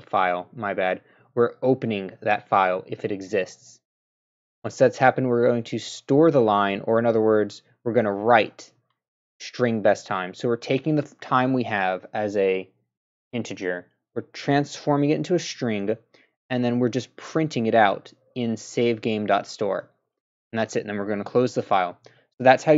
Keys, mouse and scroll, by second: 3.4 click, 17.0 click, 19.7 click, 21.6-22.7 drag.